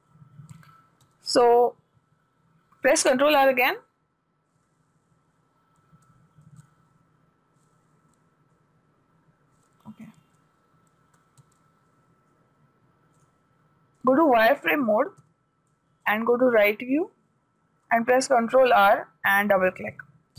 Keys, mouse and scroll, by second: 1.5 a, 3.7 ctrl+r, 8.9-10.9 middle drag, 10.9 ctrl+z, 12.3-14.6 middle drag, 13.6-15.6 drag, 15.6 a, 17.4 click, 18.8 ctrl+r.